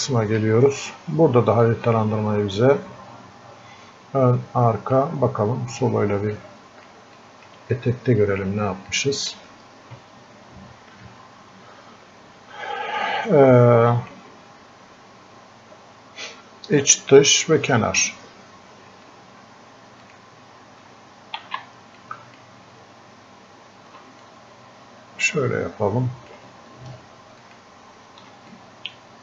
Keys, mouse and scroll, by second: 1.7-5.8 drag, 5.8 click, 7.2 alt+click, 7.8 click, 8.9-11.1 drag, 11.1-16.4 drag, 21.4 ctrl+z, 22.0-24.3 drag, 24.3-29.2 drag.